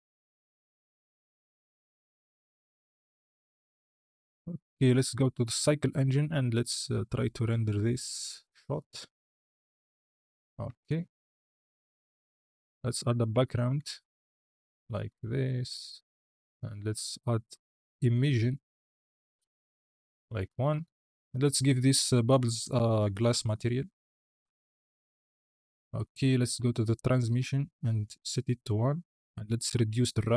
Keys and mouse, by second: 0.2 space, 0.7 space, 3.9 space, 5.0 click, 6.2 z, 10.6 shift+a, 11.8-15.0 typing, 12.5 KP_Enter, 16.2 click, 17.9 click, 18.4 click, 26.8 click, 27.4-28.5 drag, 29.2-30.3 drag.